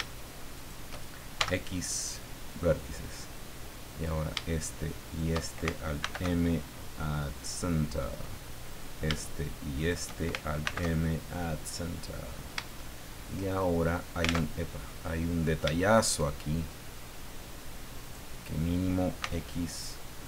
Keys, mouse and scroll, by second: 0.5 shift+right click, 1.4 shift+x, 2.4 click, 3.9 right click, 5.0 shift+right click, 6.0 alt+m, 7.4 click, 8.7 right click, 9.7 shift+right click, 10.6 alt+m, 11.2 alt+click, 11.7 scroll down 2, 12.0 click, 13.5 shift+click, 14.4 alt+Tab, 14.9 middle click, 15.7 shift+middle click, 18.0 right click, 19.2 x, 20.1 click.